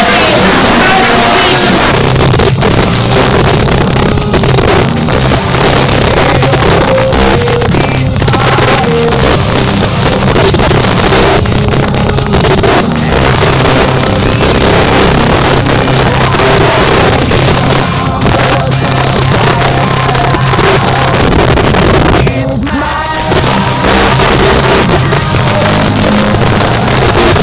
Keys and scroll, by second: 1.8 Page_Down.